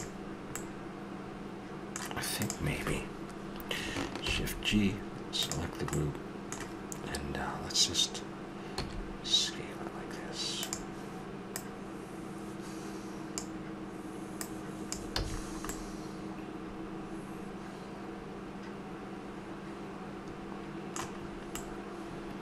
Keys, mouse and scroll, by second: 0.5-2.4 middle drag, 2.4-4.1 drag, 4.2 shift+g, 7.6-8.7 middle drag, 8.7 s, 11.5 click, 14.4-15.7 drag, 15.1 a, 15.7-17.5 middle drag, 21.2-22.4 middle drag.